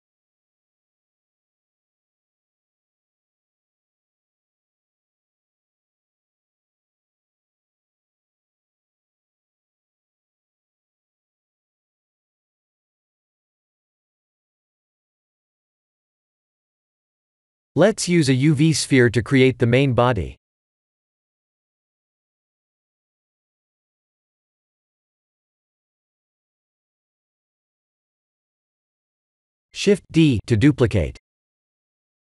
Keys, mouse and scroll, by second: 1.8 ctrl+r, 3.1 Tab, 3.4 middle click, 5.5 Tab, 6.0 scroll up 1, 6.4 middle click, 8.4 middle click, 9.9 3, 10.8 2, 11.5 alt+click, 12.1 g, 14.2 Tab, 14.6 middle click, 16.3 middle click, 17.1 KP_1, 17.9 middle click, 18.6 click, 19.0 scroll down 2, 19.5 shift+a, 22.3 KP_1, 25.3 scroll down 1, 27.3 g.